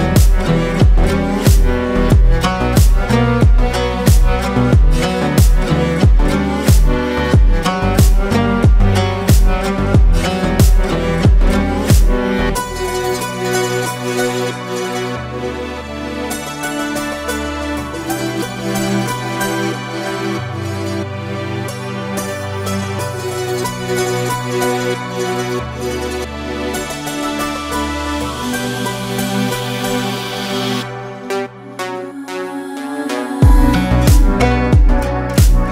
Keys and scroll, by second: 0.2 ctrl+space, 2.6 ctrl+space, 14.1 ctrl+space, 16.5 space, 20.5 ctrl+g, 22.5 ctrl+space, 24.1 ctrl+space, 26.6 Up, 27.7 space, 28.8 ctrl+space, 35.3 ctrl+space.